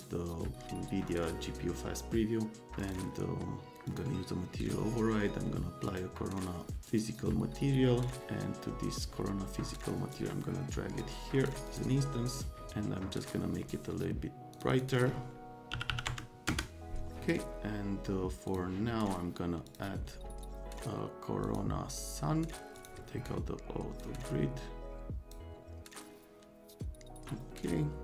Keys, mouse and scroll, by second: 1.1 click, 2.7 click, 3.8 click, 5.9 click, 6.9 click, 8.2 click, 9.7 click, 11.0 click, 11.6 click, 13.2 click, 14.5 click, 14.7 click, 15.7 KP_1, 15.9 KP_1, 16.1 KP_0, 16.4 KP_Enter, 18.4 click, 19.7 click, 21.4 click, 22.8 click, 24.0-25.3 drag.